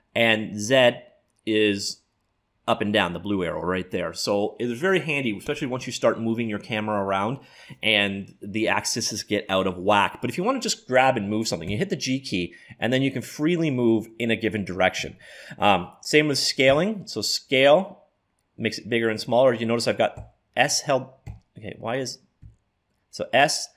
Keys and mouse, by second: 11.7 g, 22.4 s.